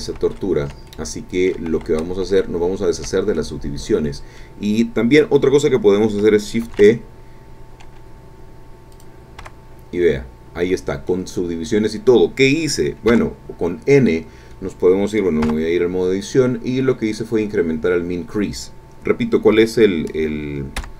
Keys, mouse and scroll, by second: 0.1 ctrl+z, 0.8 ctrl+click, 1.9 ctrl+z, 3.3-4.6 ctrl+drag, 6.6 shift+e, 8.9 click, 9.4 Tab, 10.0-11.3 drag, 13.1 n, 15.5 Tab, 19.5 Escape, 20.7 n.